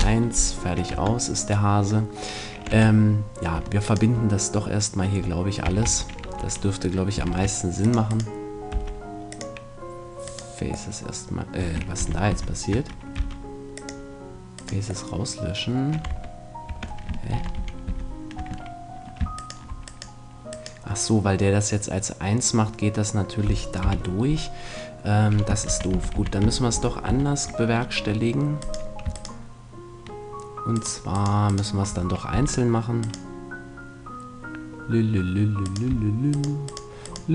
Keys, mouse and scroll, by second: 0.0 Return, 0.9 Tab, 1.7-3.3 middle drag, 2.7 Tab, 3.8-5.7 right drag, 5.6 a, 5.8 a, 6.2 f, 7.2 ctrl+Tab, 8.2-10.0 right drag, 8.7 x, 10.2 right click, 11.0-13.2 middle drag, 12.0 ctrl+z, 12.3 ctrl+z, 13.2 x, 14.6-16.1 right drag, 16.1 Tab, 16.6 Tab, 17.3 ctrl+z, 17.6 ctrl+z, 17.8 ctrl+z, 19.4-22.3 right drag, 23.8 KP_1, 25.7 ctrl+z, 25.9 ctrl+z, 26.1 ctrl+z, 26.4 ctrl+z, 26.7 ctrl+z, 27.0 ctrl+z, 28.0 middle click, 28.6-34.7 right drag, 32.3 f, 35.6-37.3 right drag.